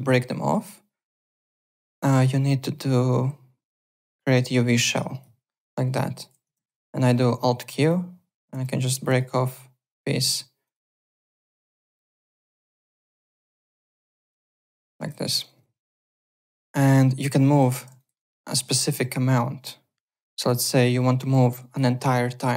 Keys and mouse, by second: 0.1 ctrl+z, 1.5 click, 5.1 click, 5.7 click, 6.5 ctrl+z, 7.4 alt+q, 7.8 click, 8.5 ctrl+z, 8.8 click, 9.5 click, 10.2 alt+q, 10.6 click, 11.7-12.6 typing, 12.2 click, 13.1 click, 13.8 ctrl+z, 14.1 alt+q, 14.5 click, 15.1 ctrl+z, 15.6 alt+Tab, 16.0 alt+click, 16.7 click, 17.6 3, 17.9 alt+right click, 18.1 alt+middle click, 18.4 alt+right click, 18.5 alt+middle click, 21.3 alt+middle click, 21.6 alt+right click, 21.8 alt+middle click.